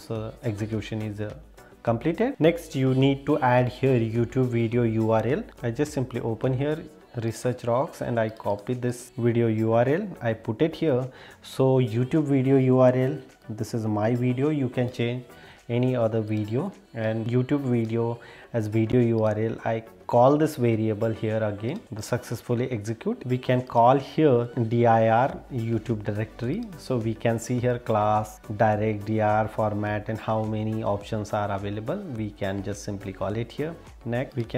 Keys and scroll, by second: 2.3 super+e, 14.9 super+e.